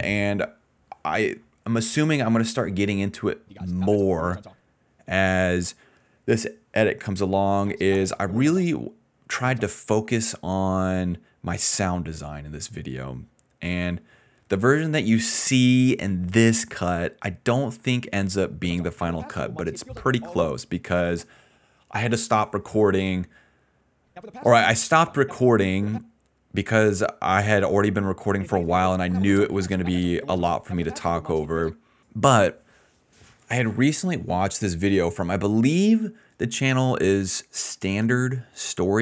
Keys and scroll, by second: 3.1 ctrl+s, 3.4 space, 4.6 space, 7.4 ctrl+s, 7.5 space, 8.8 space, 9.3 space, 9.7 space, 17.2-20.4 typing, 18.4 ctrl+s, 21.9 a, 23.8-25.9 typing, 27.7 s, 27.8 s, 28.3 space, 30.9 d, 31.6 space, 32.3 d, 38.0-39.0 typing.